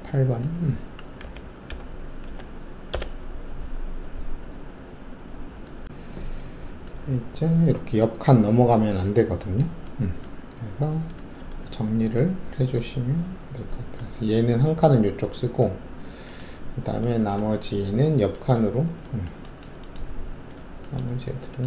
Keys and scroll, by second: 1.2 Left, 1.6 Delete, 2.2 8, 2.9 Return.